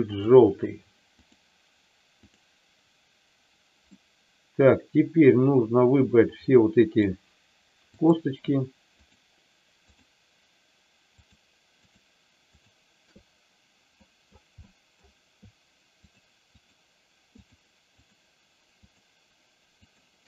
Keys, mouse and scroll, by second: 0.1 click, 2.2 click, 4.0-7.0 middle drag, 8.0 click, 11.2 shift+click, 11.7 shift+click, 12.5 shift+click, 14.0 middle click, 14.6 middle click, 16.5 shift+click, 17.3 shift+click, 17.8 shift+click, 18.7 shift+click, 19.9 shift+click.